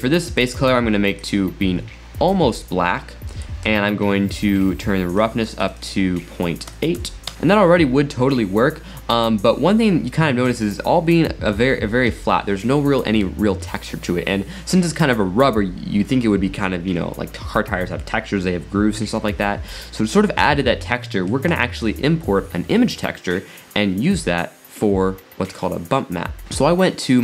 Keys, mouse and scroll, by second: 0.3 click, 3.4-5.2 middle drag, 5.2-7.3 drag, 7.3 shift+middle click, 8.3-8.7 scroll up 1, 8.7 scroll down 1, 21.0-21.6 middle drag, 21.6-22.6 scroll down 7.